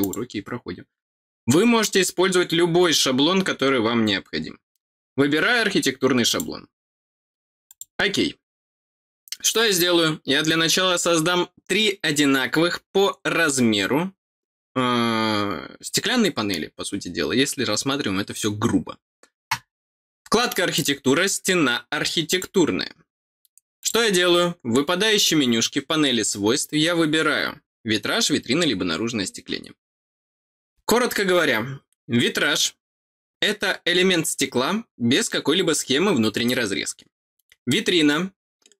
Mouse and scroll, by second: 0.0 click, 6.2 click, 7.6 click, 20.7 click, 22.2 click, 23.7 click.